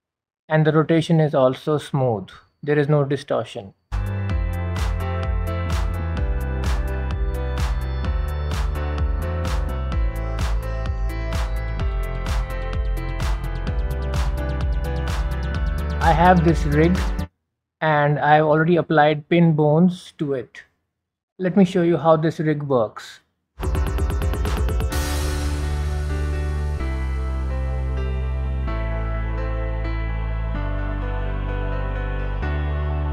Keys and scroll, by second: 28.4 ctrl+z.